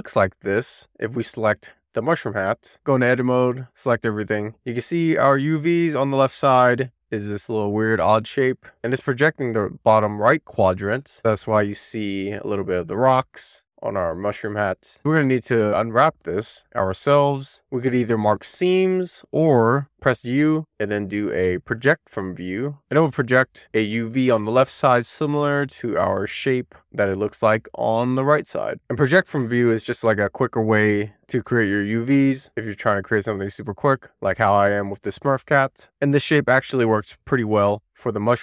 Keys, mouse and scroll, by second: 2.7 Tab, 3.4 a, 4.8-5.4 scroll up 1, 5.6 shift+middle click, 20.6 u, 24.4 click, 25.5 Tab, 25.5 click.